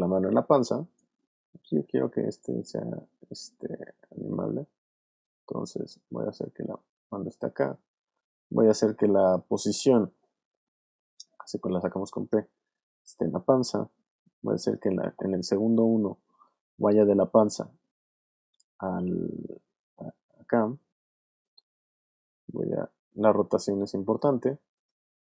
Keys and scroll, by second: 4.4 w, 9.9 p, 17.0 v, 21.7 w.